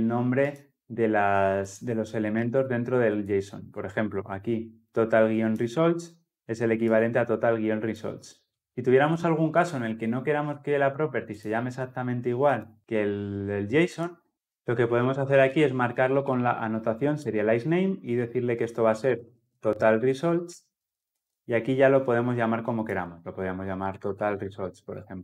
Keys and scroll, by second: 17.1 Return.